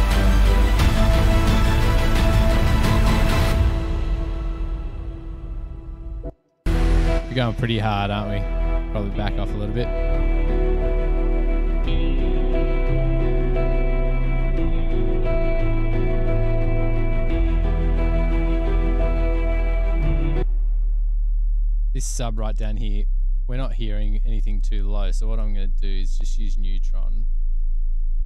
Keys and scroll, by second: 6.5 space, 6.7 space.